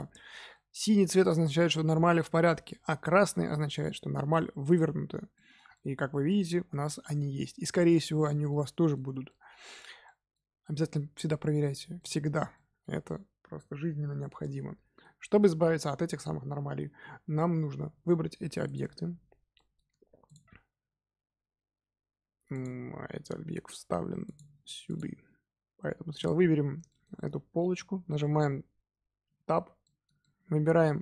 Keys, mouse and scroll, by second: 0.5-17.6 middle drag, 18.6 click, 19.5-20.2 middle drag, 20.2 shift+click, 22.5 click, 24.2 click, 24.8 click, 26.1 click, 26.8-29.2 shift+middle drag, 29.2 Tab, 29.8-31.0 middle drag.